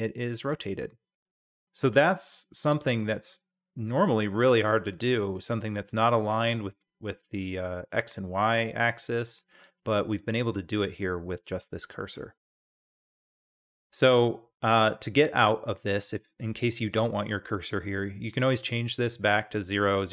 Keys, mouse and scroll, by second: 0.1-1.1 middle drag, 1.9-4.1 middle drag, 4.7-5.4 middle drag, 7.0-7.4 middle drag, 9.0-9.8 middle drag, 12.7-13.3 middle drag, 14.7-15.9 middle drag.